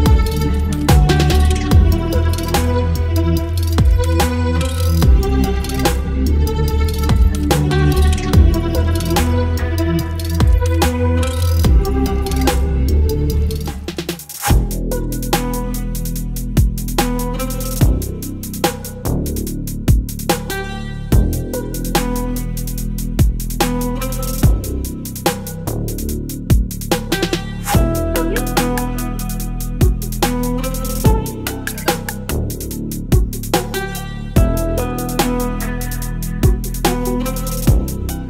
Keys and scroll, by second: 1.2 Delete, 1.7 Delete, 2.0 Delete, 2.3 Delete, 2.6 Delete, 3.0 Delete, 3.3 Delete, 4.2 Delete, 4.3 space, 4.8 Delete, 5.2 Delete, 5.8 Delete, 7.0 Delete, 7.3 Delete, 7.7 Delete, 8.0 Delete, 8.1 x, 8.4 Delete, 8.6 ctrl+z, 8.7 ctrl+z, 8.8 space, 9.5 Delete, 9.7 Delete, 10.0 Delete, 10.3 Delete, 10.6 Delete, 10.8 Delete, 11.4 Delete, 11.8 Delete, 12.1 Delete, 12.4 Delete, 12.8 Delete, 13.1 Delete, 14.0 Delete, 14.4 Delete, 14.6 Delete, 14.9 Delete, 15.2 Delete, 15.4 Delete, 15.7 Delete, 15.9 Delete, 17.0 Delete, 17.3 Delete, 17.8 Delete, 18.1 Delete, 18.3 Delete, 18.7 Delete, 19.1 Delete, 19.4 ctrl+z, 19.5 ctrl+z, 19.8 Delete, 20.0 Delete, 20.3 Delete, 21.3 Delete, 21.6 Delete, 22.1 Delete, 22.5 Delete, 23.0 space, 23.9 Delete, 24.3 Delete, 24.7 Delete, 25.1 Delete, 25.3 Delete, 26.0 Delete, 26.7 Delete, 27.5 Delete, 27.9 Delete, 28.3 Delete, 28.6 Delete, 28.9 Delete, 29.2 Delete, 29.5 Delete, 30.0 Delete, 30.2 Delete, 30.6 Delete, 31.0 Delete, 31.2 Delete, 33.0 space, 33.8 v, 34.8 ctrl+t.